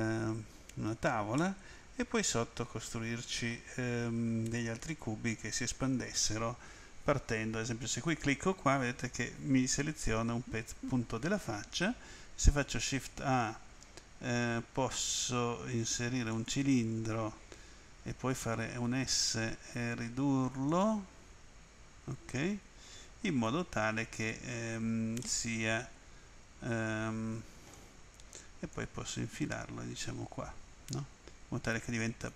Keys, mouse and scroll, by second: 1.3 middle click, 7.9 click, 12.7 shift+a, 16.3 click, 18.8 s, 20.6 click, 22.3 click, 24.3-24.7 scroll up 3, 25.2 scroll up 1, 25.2 middle click, 28.7 click.